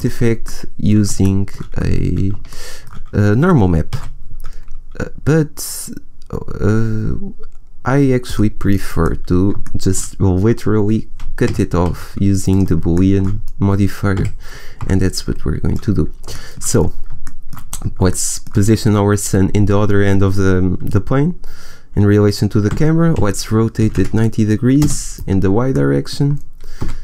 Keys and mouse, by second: 0.5 middle click, 1.3 middle click, 3.8 shift+a, 8.9-10.0 middle drag, 11.3 g, 12.5 click, 12.9 middle click, 13.0-14.0 drag, 14.1 g, 22.6 r, 26.7 s.